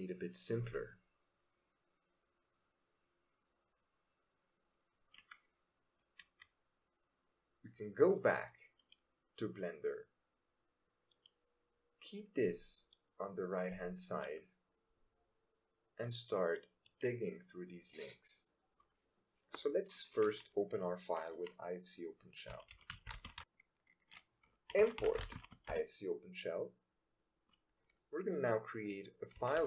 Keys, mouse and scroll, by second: 8.7 click.